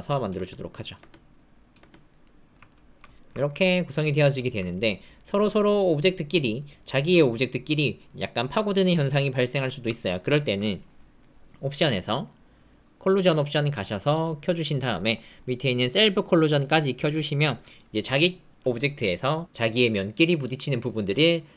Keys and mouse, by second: 0.3 space, 0.9 space, 1.7 space, 2.2 click, 2.6 ctrl+click, 3.1 shift+click, 3.3 ctrl+click, 3.6 click, 4.3 ctrl+click, 4.7 click, 6.2 click, 6.9 middle click, 8.0 middle click, 9.1 middle click, 10.0 alt+middle click, 11.2 middle click, 12.3 middle click, 15.1 middle click, 18.0 click.